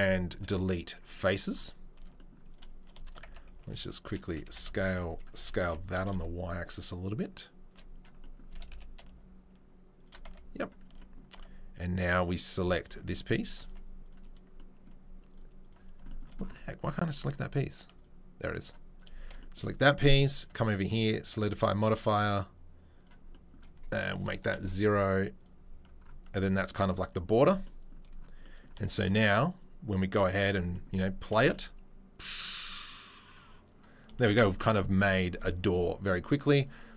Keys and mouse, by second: 0.3 Delete, 2.0 Tab, 3.2 Tab, 3.6 a, 4.2 s, 5.3 s, 8.5 s, 10.3 Tab, 10.5 click, 10.6-11.7 middle drag, 10.8 Tab, 11.7 click, 11.8 middle click, 12.5 click, 12.7-14.0 middle drag, 12.9 Tab, 13.6 Tab, 14.0 click, 14.1-15.3 middle drag, 15.3 click, 15.4-17.9 middle drag, 18.0 middle click, 18.6-20.7 middle drag, 20.7 click, 20.8 middle click, 23.0-27.4 drag, 27.4-29.6 middle drag, 29.6-31.0 drag, 31.0 shift+right click, 31.3 shift+space, 31.4-34.0 drag, 34.0 shift+right click, 34.2 shift+space, 34.3 click, 34.9-36.5 middle drag, 36.5 click, 36.6 middle click, 36.9 click.